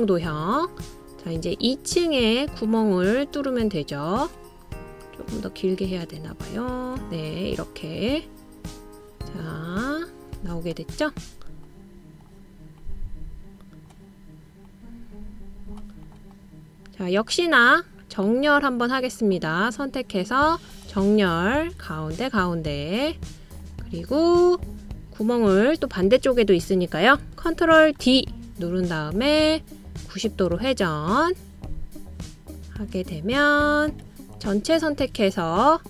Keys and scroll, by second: 29.2 super+o.